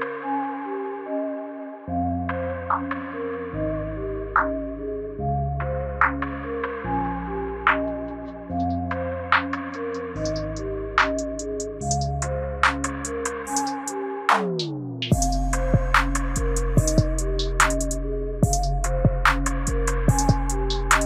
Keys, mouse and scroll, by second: 0.2 space, 6.5 space, 7.0 right click, 12.1 space, 20.5 space.